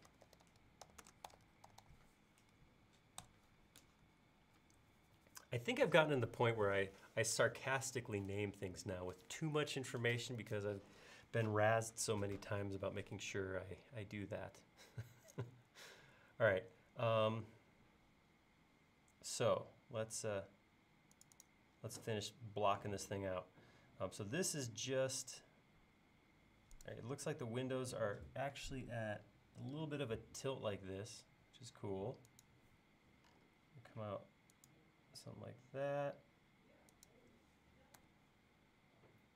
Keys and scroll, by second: 0.9-1.3 typing, 3.2 Return, 23.5 l, 38.0 a.